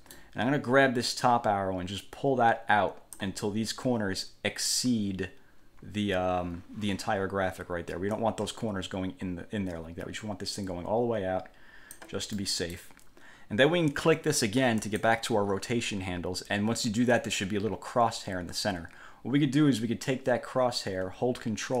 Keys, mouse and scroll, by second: 1.4-3.5 drag, 8.3-12.3 drag, 12.5 click, 15.0 click.